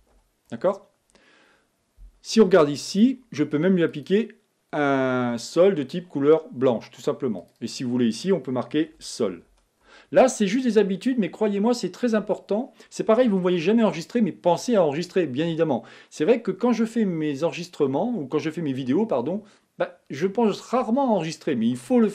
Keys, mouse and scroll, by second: 5.0 click, 7.8 click, 8.0-13.0 drag.